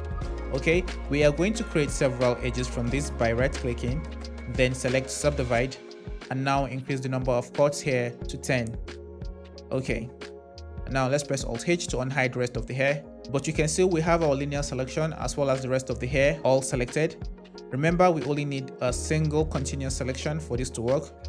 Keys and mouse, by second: 3.6-5.3 drag, 7.4-9.9 drag, 11.4 alt+h.